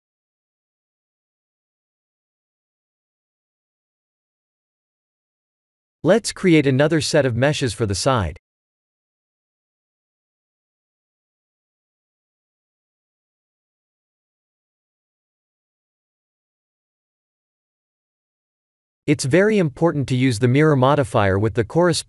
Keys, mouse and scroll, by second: 1.7-2.4 scroll down 5, 2.5 middle click, 3.9 click, 4.7 KP_7, 5.8 shift+middle click, 6.6 shift+middle click, 6.9 shift+middle click, 7.7 shift+d, 13.0-13.6 scroll down 1, 13.6-13.9 scroll down 4, 15.2 click, 19.1 ctrl+z, 20.8 click, 21.2 click.